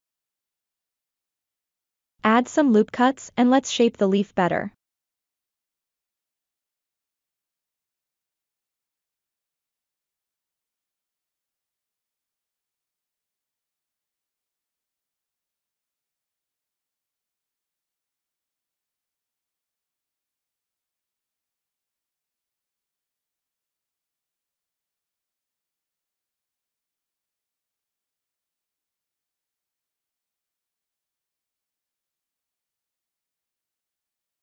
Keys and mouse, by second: 1.6 ctrl+r, 5.7 ctrl+r, 8.4 KP_7, 9.2-9.7 shift+middle drag, 11.0-11.5 drag, 12.8 s, 13.6-15.5 drag, 17.5 1, 17.6 click, 19.1 g, 19.4-20.5 drag, 20.9-22.1 middle drag, 22.6 middle click, 23.2 2, 24.8 middle click, 26.6 middle click, 27.3-28.9 drag, 29.2-31.8 middle drag, 33.4 middle click, 34.3-34.4 drag.